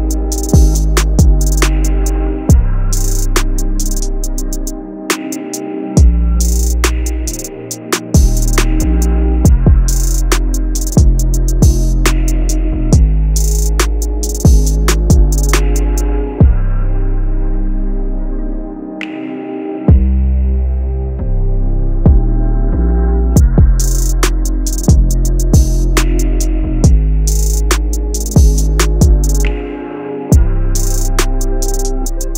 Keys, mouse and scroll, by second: 4.3 click, 4.4-9.5 drag, 12.2 click, 16.1-21.8 drag, 21.8 click, 26.4-32.3 drag.